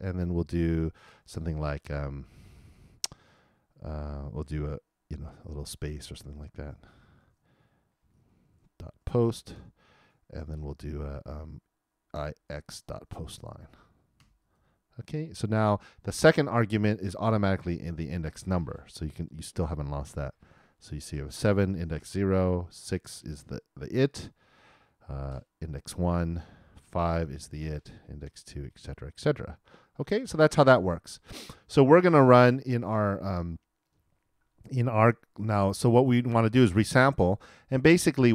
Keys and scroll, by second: 5.3 shift+', 6.1 shift+;, 8.4 shift+', 8.9 shift+., 20.1 super+Return.